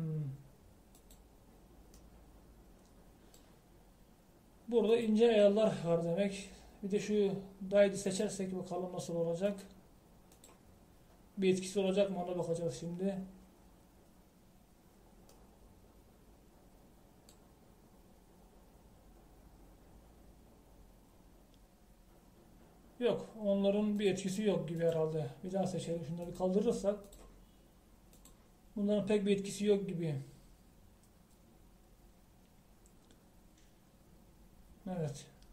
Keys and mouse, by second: 2.2 click, 3.0 middle click, 16.5 middle click, 25.2-31.0 drag.